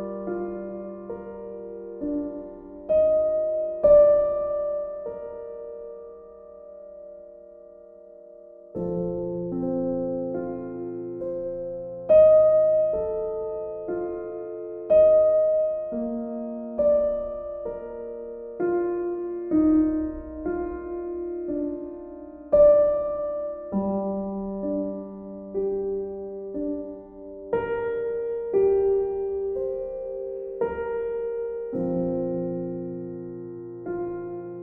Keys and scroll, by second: 3.2 b, 7.8 ctrl+z.